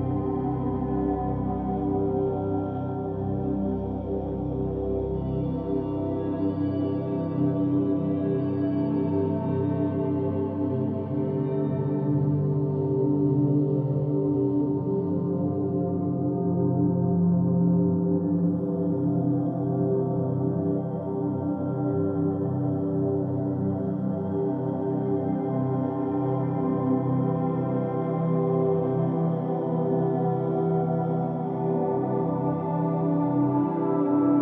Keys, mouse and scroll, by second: 4.6 Tab, 5.8 Tab, 7.0 s, 11.3 Tab, 13.4-14.3 scroll down 2, 14.3-16.1 middle drag, 16.1-16.4 scroll up 2, 17.1 Tab, 18.4 s, 20.8 Tab, 22.3 Tab, 23.6 s, 24.9 Tab, 25.8-26.5 scroll down 3, 26.5-28.4 middle drag, 28.4-29.3 scroll up 2, 29.3-32.3 middle drag, 32.3 scroll up 1, 32.9 Tab.